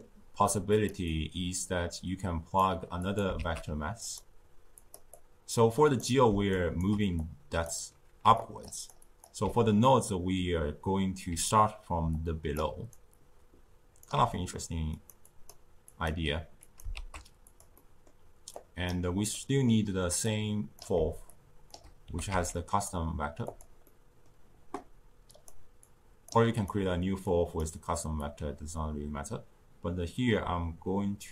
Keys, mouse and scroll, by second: 0.6 click, 1.0-3.0 drag, 3.2 shift+d, 4.7 click, 5.0-6.5 drag, 6.5 shift+right click, 7.1 click, 8.2 d, 8.3 click, 8.6-9.3 d, 9.0 click, 9.1 d, 11.2-11.9 d, 12.0-12.5 drag, 12.5 d, 12.9-14.0 right drag, 14.0 d, 14.2 d, 14.8 click, 15.2-15.9 drag, 16.5 click, 16.8 shift+d, 17.7-18.5 middle drag, 18.5 click, 19.2 middle click, 20.2-21.2 drag, 22.0 g, 23.8-25.2 middle drag, 25.2 click, 25.8 click, 27.2 click, 28.1-31.2 drag.